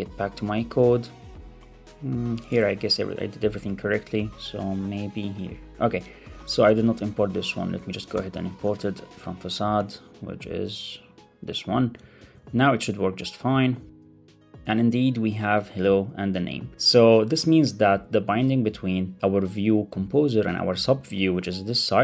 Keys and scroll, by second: 2.6 ctrl+Tab, 4.0 ctrl+Tab, 7.0 Right, 7.6 shift+super+Left, 8.3 alt+Right, 8.5 ctrl+space, 12.1 super+s, 13.8 super+r.